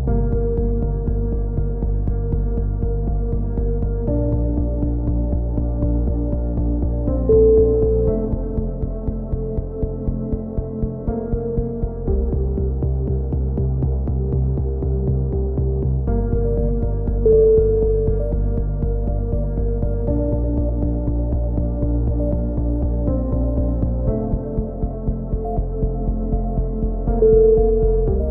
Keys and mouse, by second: 0.6 alt+m, 1.4-2.6 drag, 2.6 a, 2.7 z, 3.0-3.6 middle drag, 4.1-5.5 drag, 4.4 k, 6.9 KP_3, 7.1 e, 7.6 ctrl+z, 7.9 a, 8.1-9.1 drag, 8.4 z, 14.1-15.0 middle drag, 15.4 KP_7, 15.5-16.6 middle drag, 15.6 z, 20.3 g, 23.1 right click, 23.1 c, 23.5 z, 24.1-25.1 drag, 25.1 g, 26.8 a, 27.9 Tab.